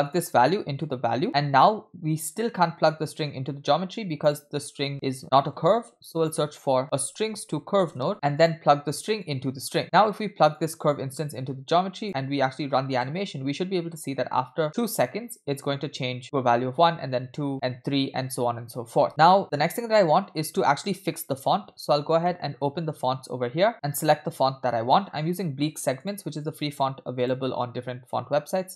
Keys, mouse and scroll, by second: 0.8 click, 2.3-4.1 drag, 5.6 shift+a, 8.1 BackSpace, 9.2-9.8 drag, 10.5 click, 10.8-12.0 drag, 12.4-13.0 middle drag, 13.0 space, 19.0 space, 19.1 click, 19.9-21.9 scroll up 2, 21.9 scroll up 2, 22.3 middle click, 22.5-23.2 scroll up 1, 25.0-26.0 scroll up 3, 26.0-27.3 drag.